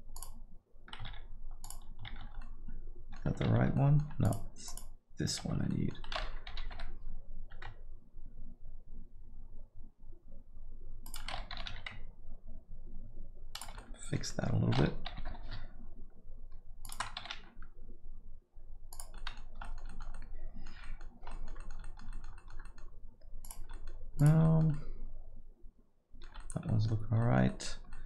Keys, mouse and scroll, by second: 0.1 click, 1.1 shift+z, 1.6 shift+click, 2.1 shift+z, 2.4 alt+middle click, 3.4 shift+z, 3.7 alt+middle click, 4.2 click, 5.4 shift+z, 5.7 alt+middle click, 6.5 g, 11.5 g, 13.7 alt+middle click, 14.3 alt+middle click, 15.1 g, 17.2 g, 19.1 middle click, 19.4 scroll down 1, 19.6 alt+middle click, 19.9 middle click, 20.1 alt+middle click, 20.8 middle click, 21.1 scroll down 1, 21.3 alt+middle click, 21.6 middle click, 21.8 alt+middle click, 22.1 middle click, 22.3 alt+middle click, 22.6 middle click, 23.4 click, 23.7 alt+middle click, 24.2 click, 24.4 middle click, 24.7 alt+middle click, 26.4 middle click, 26.6 middle click, 26.9 scroll down 1, 27.2 alt+middle click, 27.5 middle click, 27.9 alt+middle click.